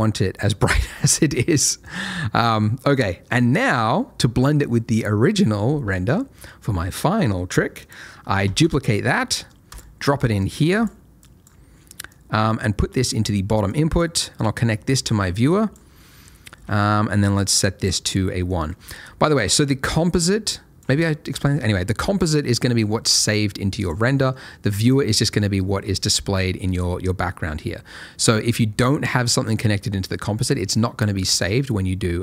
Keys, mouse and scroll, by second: 0.4 click, 0.8 scroll down 1, 1.1 middle click, 1.8 click, 2.6 middle click, 2.9 scroll down 1, 3.0 middle click, 3.6 click, 7.8 click, 8.4 shift+d, 9.6 click, 15.9 middle click, 16.2-17.3 scroll up 1, 17.3 click, 18.1 middle click, 19.0 scroll down 1, 19.2 middle click, 19.8 click, 21.2 middle click, 22.1 click, 24.1 middle click, 24.7 click, 29.4 click.